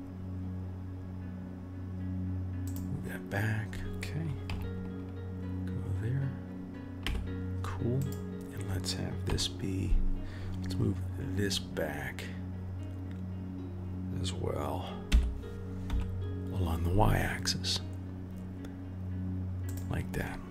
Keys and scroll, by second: 4.4 KP_3, 7.0 KP_1, 9.2 KP_3, 15.1 g.